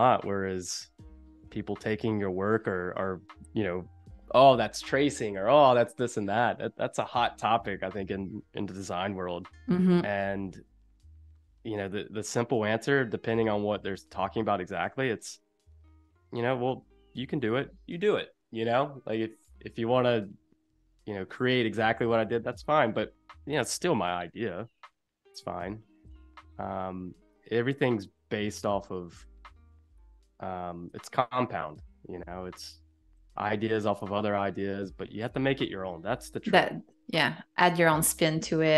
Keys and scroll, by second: 9.4 -, 12.0 a, 24.1 shift+c, 27.4 space, 30.1 =, 30.8 a, 33.1 =, 33.8 a.